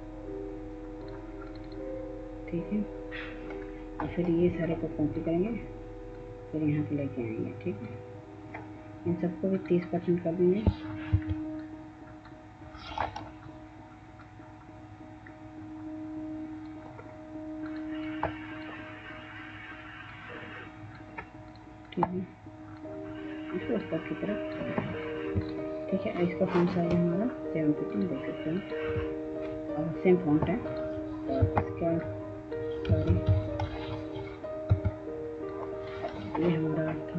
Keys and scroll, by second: 10.8 F2, 32.8 ctrl+z, 34.4 F2.